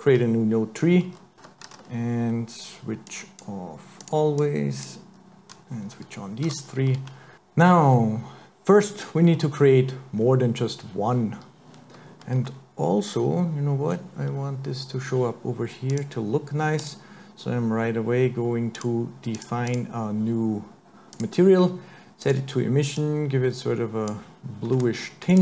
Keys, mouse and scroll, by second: 1.3 n, 1.7 t, 3.1 click, 4.1 click, 4.4 click, 6.5 t, 8.9-9.2 scroll up 3, 9.2-10.2 scroll down 1, 10.2-10.5 scroll down 4, 10.5 scroll up 1, 14.3-15.3 scroll down 1, 15.9 click, 16.8 click, 18.8 click, 19.7 click, 22.2 click, 25.3 click.